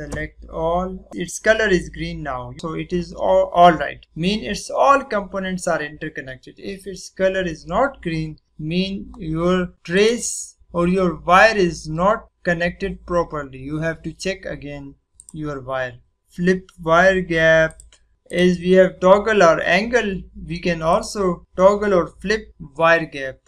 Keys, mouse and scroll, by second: 0.0 a, 9.9 click, 15.1 click, 17.6 click, 18.2 click, 20.9 click.